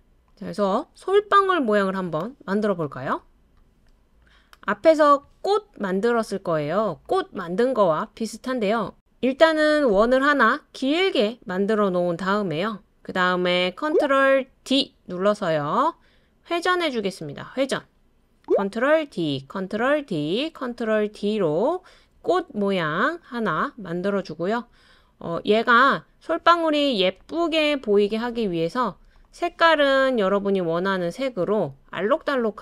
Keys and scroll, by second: 14.7 super+d, 19.1 super+d, 19.9 super+d, 20.6 super+d.